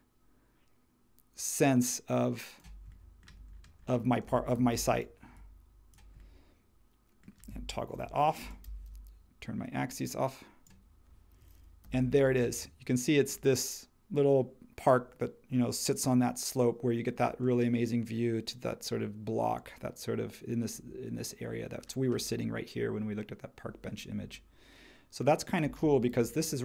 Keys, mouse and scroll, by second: 4.5 shift+e, 7.9 shift+t, 11.8 h, 26.1 shift+e.